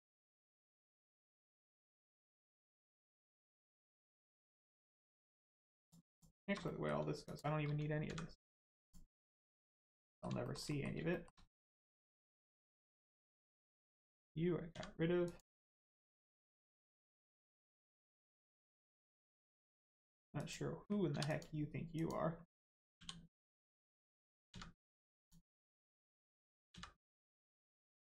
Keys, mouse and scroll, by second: 1.2 shift+middle click, 1.6 middle click, 1.7 middle click, 4.3 middle click, 4.7 scroll up 1, 5.0 middle click, 5.8 click, 6.1 shift+click, 6.6 middle click, 7.2 shift+click, 8.0 x, 8.8 click, 9.2 middle click, 10.4 shift+middle click, 10.6 middle click, 11.1 shift+middle click, 11.5 middle click, 11.6 middle click, 13.7 click, 14.7 x, 15.2 click, 15.6 middle click, 18.4 click, 18.8 middle click, 19.2 Tab, 19.4 middle click, 19.8 Tab, 20.4 click, 21.1 2, 21.2 click, 23.0 l, 23.5 middle click, 25.2 click, 25.5 middle click, 26.7 x, 27.9 click.